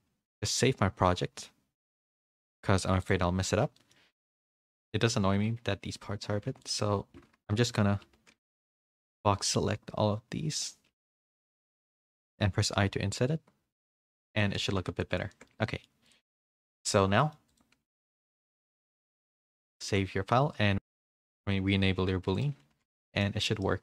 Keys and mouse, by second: 2.0-3.1 drag, 3.7 middle click, 4.2 drag, 4.5 Tab, 4.5-4.9 middle drag, 5.5 Tab, 6.4 3, 7.5 KP_3, 8.0 z, 8.6 b, 10.9 z, 11.2 shift+middle drag, 11.6 middle click, 13.2 i, 14.3 Tab, 14.6 a, 14.8 a, 15.0 middle click, 15.3 shift+middle click, 15.6 middle drag, 16.0 drag, 16.4 shift+middle drag, 16.8-17.2 drag, 17.2 middle click, 17.5-17.8 drag, 19.8 ctrl+s, 21.1 click, 22.3 click, 22.7 h, 23.0 middle drag, 23.6-23.8 middle drag.